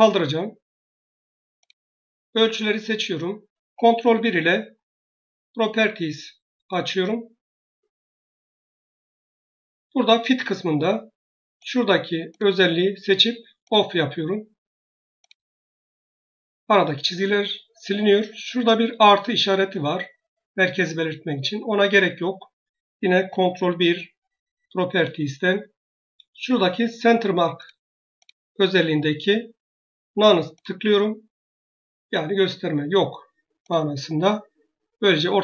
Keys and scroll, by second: 3.8 ctrl+1, 23.6 ctrl+1.